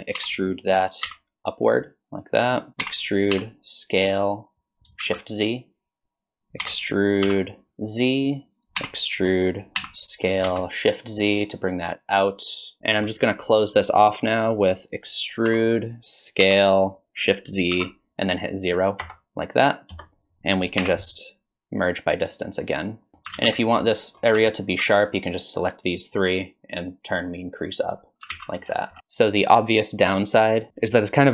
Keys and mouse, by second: 0.2 e, 2.9 e, 6.7 e, 8.8 e, 12.8 ctrl+shift+z, 12.8 shift+middle click, 15.5 e, 20.8 m, 23.4 alt+z, 23.6 middle click, 25.1-26.4 drag, 27.3 click, 28.3 alt+z.